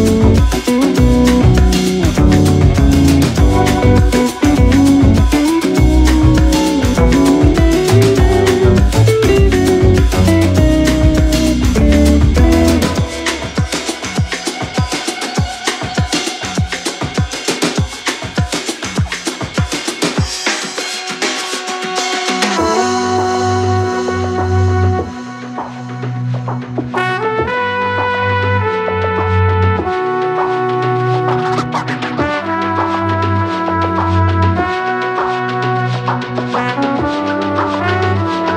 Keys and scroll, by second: 2.4 ctrl+z, 2.6 shift+c, 2.9 shift+v, 3.1 shift+c, 7.2 shift+Left, 7.7 shift+Right, 8.4 shift+Right, 9.1 shift+Left, 9.3 shift+Right, 10.1 shift+c, 10.5 shift+c, 20.0 x, 23.5 Escape, 29.7 x, 37.3 shift+Up, 37.5 shift+Up.